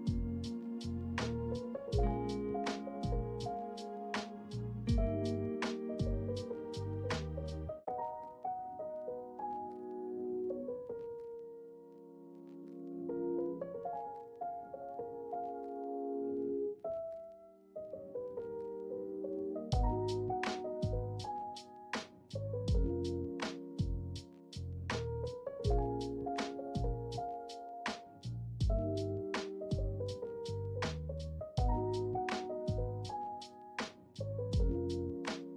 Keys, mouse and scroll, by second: 1.4 middle click, 2.0 shift+middle click, 2.6 middle click, 3.3 Tab, 3.7-5.5 middle drag, 6.1 Tab, 6.9 shift+middle click, 8.2 middle click, 9.9 e, 10.2 s, 15.0 ctrl+middle click, 15.6 shift+middle click, 16.5 ctrl+click, 17.2 shift+click, 18.8 right click, 21.5 ctrl+f, 33.5 r.